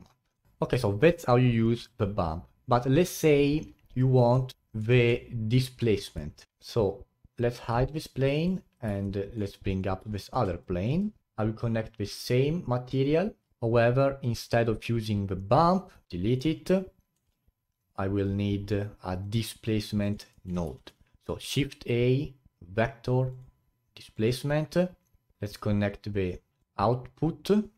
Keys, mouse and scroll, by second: 0.5 scroll down 2, 0.8-3.7 alt+drag, 3.7-4.1 scroll down 9, 4.3-6.5 middle drag, 6.5 click, 7.6 click, 7.8 click, 8.2 click, 8.4 click, 9.0 alt+middle click, 9.7 click, 10.0-10.6 alt+middle drag, 10.6-14.8 alt+drag, 14.8-16.1 middle drag, 16.1 Delete, 18.6-19.2 middle drag, 19.2-27.7 drag.